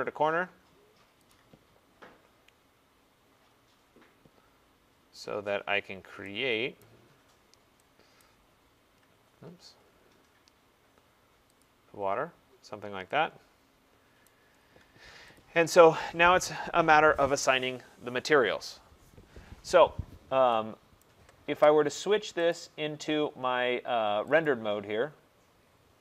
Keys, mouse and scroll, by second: 1.4 click, 6.9 right click, 7.3-8.3 scroll, 8.3 right click, 8.3-9.3 scroll, 9.3-9.9 scroll, 9.9-10.3 scroll, 10.4-11.4 scroll, 11.7 click, 12.2-13.5 scroll, 13.5-14.2 scroll, 14.2 right click, 14.7-15.5 scroll, 15.5 click, 16.6 click, 19.4 middle click, 20.1 middle click, 20.2 middle click, 20.5 middle click, 21.1 right click, 22.6 click, 24.5 click.